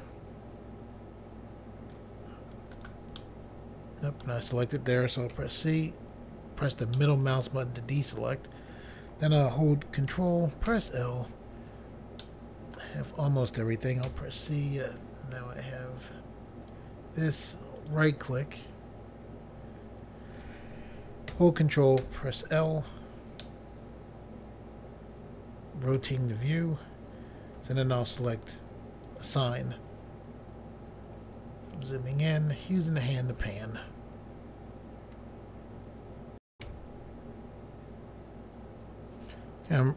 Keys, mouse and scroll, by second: 2.8 right click, 3.2 middle click, 5.3 c, 7.0 middle click, 8.0 right click, 10.7 ctrl+l, 12.2 middle click, 14.1 c, 14.8 click, 17.8 right click, 22.0 ctrl+l, 23.4 middle click, 26.7-27.2 scroll down 1, 29.1 click, 31.3-32.1 scroll up 1, 32.7 scroll up 1, 33.4 click, 37.8 Pause, 38.7 scroll down 1, 39.5 scroll down 1.